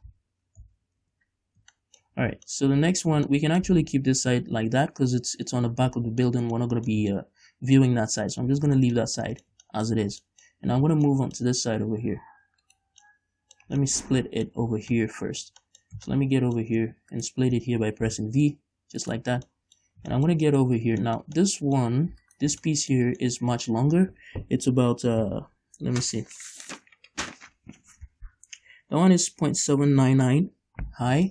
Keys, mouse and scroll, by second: 0.9 shift+n, 1.3 Tab, 1.8 scroll down 1, 2.0 shift+middle click, 2.4 a, 2.7 middle click, 3.7-9.1 middle drag, 9.9 shift+middle click, 10.2 scroll up 1, 10.5 middle click, 10.8 scroll up 1, 11.3 shift+middle click, 12.9 right click, 13.3 middle click, 14.0 shift+middle click, 14.6-17.4 middle drag, 17.1 Tab, 17.4 right click, 18.3 v, 19.4 right click, 19.6 scroll down 2, 19.7-21.0 middle drag, 20.2 scroll down 2, 21.0 scroll up 1, 21.3 shift+middle click, 22.5 alt+right click, 23.1-31.3 middle drag.